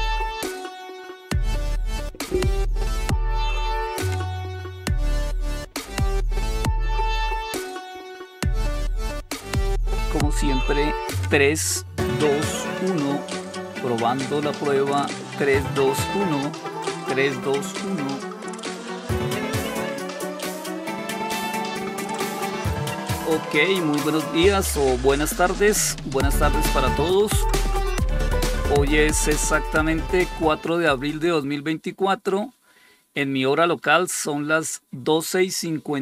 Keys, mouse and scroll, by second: 19.9 click.